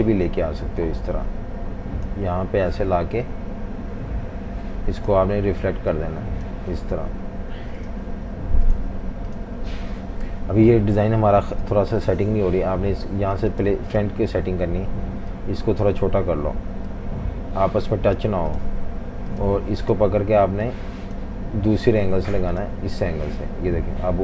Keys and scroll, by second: 12.5 Delete.